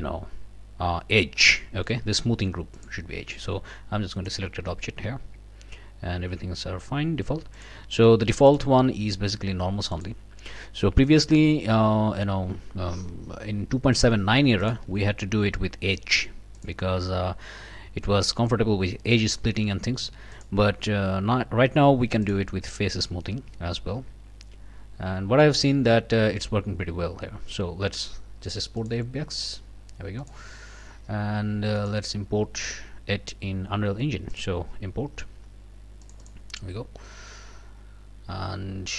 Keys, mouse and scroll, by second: 2.7 click, 4.3 click, 6.5-6.8 scroll down 1, 7.5 click, 8.5 click, 9.9 click, 14.6 click, 16.6 click, 20.3 click, 22.2 click, 28.8 click, 30.2 click, 31.8 click, 34.3 click, 36.0 click.